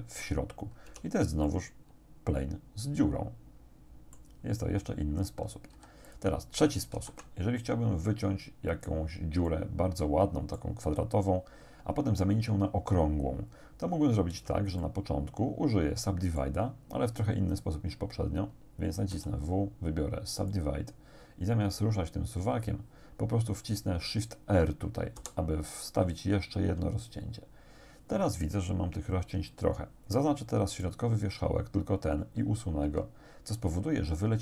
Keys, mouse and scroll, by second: 0.9 Tab, 1.5-4.4 drag, 5.8 x, 7.0 shift+a, 8.8 click, 9.5 click, 9.7-10.8 middle drag, 14.4 Tab, 14.8 click, 15.0 middle click, 15.0-16.6 drag, 19.2 w, 20.6 click, 25.2 shift+r, 30.7 right click, 32.9 x.